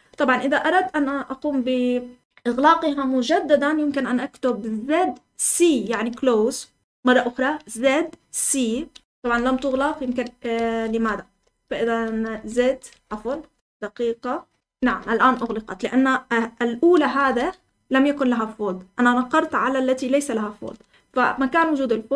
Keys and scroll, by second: 0.0-0.7 typing, 8.4-15.4 typing, 9.6 Escape, 10.5 Escape, 12.8 Escape, 17.1-17.4 typing, 21.1 j.